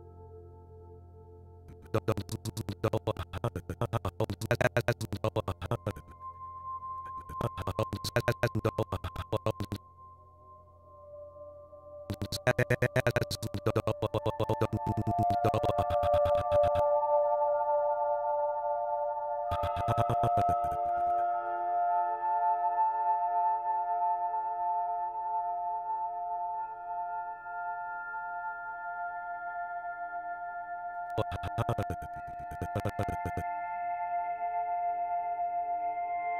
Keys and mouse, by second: 0.6 click, 1.7-9.6 drag, 10.5 click, 12.0-16.9 drag, 17.8 i, 18.3 click, 19.4-21.5 drag, 22.8 g, 25.9 Escape, 26.7 g, 26.9 y, 27.8 click, 29.9 click, 30.9-33.5 drag, 35.7 click.